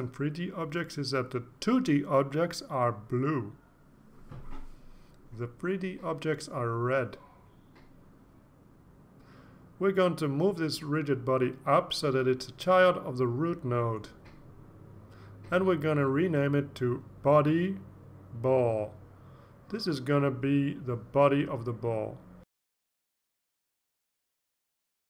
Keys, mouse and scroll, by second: 1.8 click, 8.1-8.6 drag, 8.9 click, 10.8-13.7 drag, 14.2 click, 18.5 click, 20.9-25.0 typing.